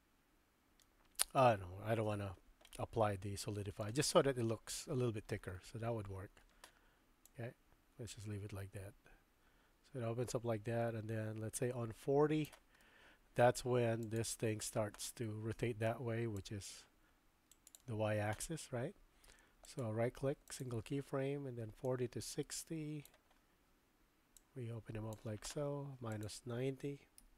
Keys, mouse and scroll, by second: 0.8-1.4 middle drag, 2.7-3.8 middle drag, 4.3-5.4 middle drag, 7.3-12.5 drag, 12.8-13.4 middle drag, 14.1 click, 16.4-17.8 drag, 19.8 right click, 21.9-23.1 drag, 24.4 click, 26.2-27.3 drag.